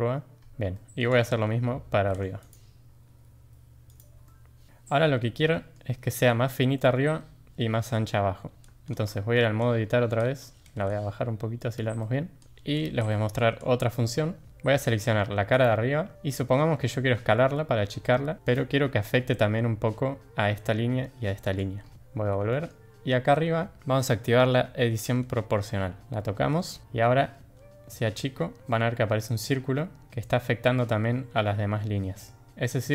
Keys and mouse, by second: 0.7 shift+middle click, 1.2 click, 1.9 ctrl+r, 4.2-4.8 drag, 4.7 Tab, 5.5 middle click, 8.6 Tab, 9.1 shift+drag, 10.5 g, 12.0-12.4 shift+drag, 12.4 Tab, 12.5 3, 13.1 shift+drag, 14.8 click, 17.1 s, 21.9 ctrl+z, 22.5 shift+click, 27.9 s.